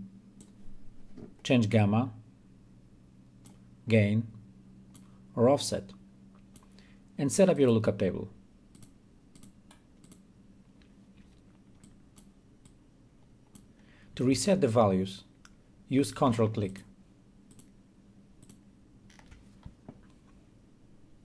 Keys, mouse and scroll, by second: 2.7-4.5 drag, 17.1 click.